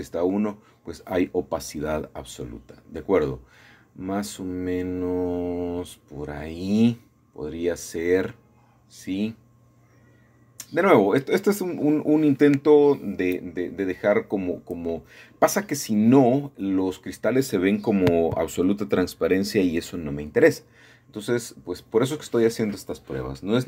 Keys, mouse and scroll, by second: 1.1 click, 2.6 KP_8, 2.9 Return, 4.9-6.0 drag, 6.0 KP_8, 6.1 KP_5, 6.3 Return, 9.3 shift+middle click, 10.2 shift+middle click, 17.0 middle click, 18.0-19.2 scroll down 1, 21.2 middle click, 21.6-23.6 scroll up 3.